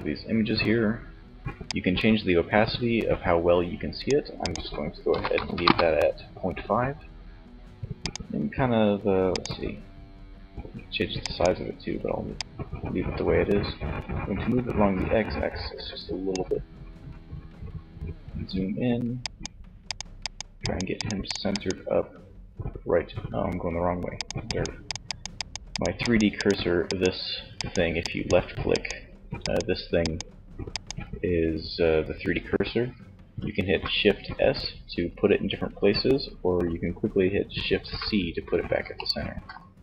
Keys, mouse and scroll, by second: 0.8-2.3 drag, 3.6-5.3 drag, 7.2-9.0 drag, 11.6-13.2 drag, 16.3-18.6 middle drag, 18.6-22.3 drag, 23.2-28.8 drag, 32.8 shift+s, 36.9 shift+c.